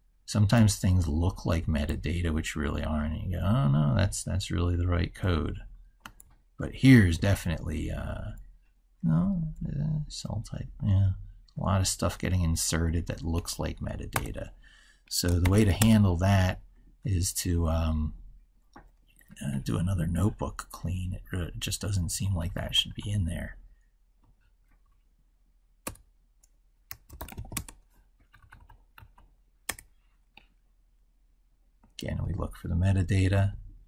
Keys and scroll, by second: 31.9 ctrl+f.